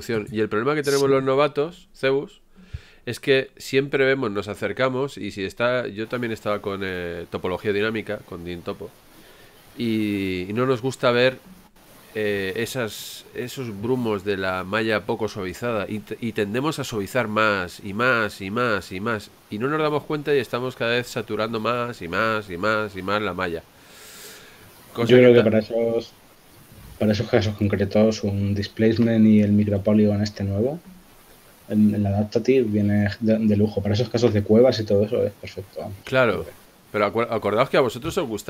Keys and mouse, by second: 1.0 Tab, 14.2 shift+z, 23.1 shift+z, 25.3 shift+z, 26.7 shift+z, 27.7 shift+z.